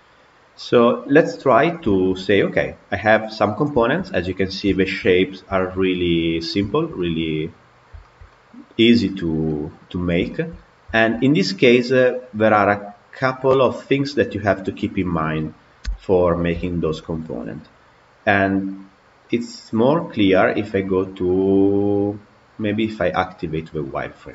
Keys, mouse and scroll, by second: 0.0-1.4 scroll down 1, 1.4 click, 1.8-3.3 shift+middle drag, 3.3 click, 3.7-4.3 shift+middle drag, 4.3-4.6 scroll up 1, 4.6-6.2 shift+middle drag, 6.2-6.5 scroll up 1, 6.5-10.5 shift+middle drag, 10.5 scroll down 1, 10.8-14.8 shift+middle drag, 14.8 click, 15.7 h, 16.5-19.9 shift+middle drag, 20.7 click, 21.7 click, 22.8-24.3 drag.